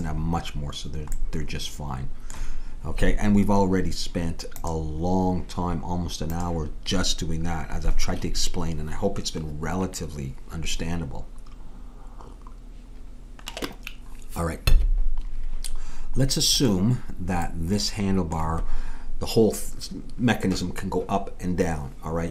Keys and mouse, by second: 1.0-6.3 middle drag, 16.6-18.5 drag, 17.5-22.3 middle drag.